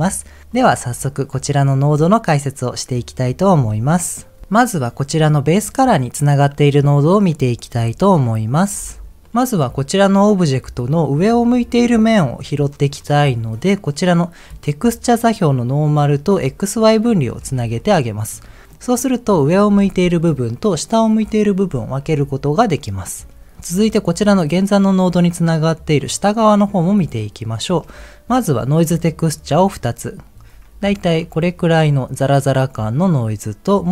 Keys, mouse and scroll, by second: 0.5 click, 1.0 click, 8.4 click, 8.8 m, 14.1 click, 17.6 ctrl+z, 18.6 middle click, 29.2 click, 29.8 ctrl+shift+click, 30.8-31.3 scroll up 2, 31.3 shift+middle click, 33.6 ctrl+shift+click.